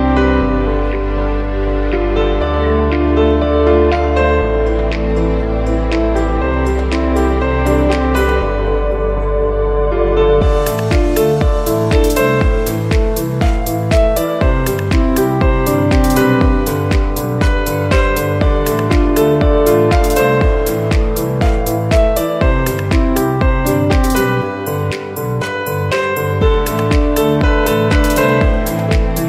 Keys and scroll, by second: 2.2 v, 10.1 alt+Up, 10.3 Down, 12.9 v, 15.7 v, 17.1 super+x, 17.7 super+z, 18.8 super+x, 19.1 v, 27.6 v.